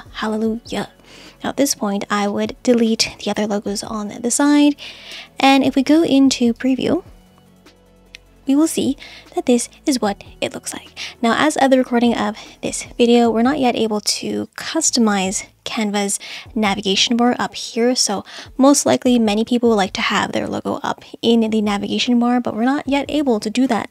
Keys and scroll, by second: 3.4 BackSpace, 5.1 BackSpace.